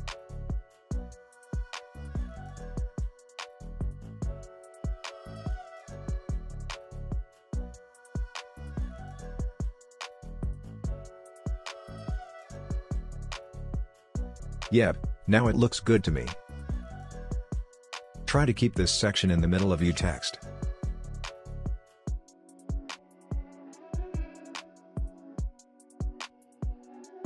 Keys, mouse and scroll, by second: 10.7-14.5 drag, 14.5 space, 16.1-17.7 drag, 21.0-23.5 drag, 23.5 space, 25.0-27.2 drag.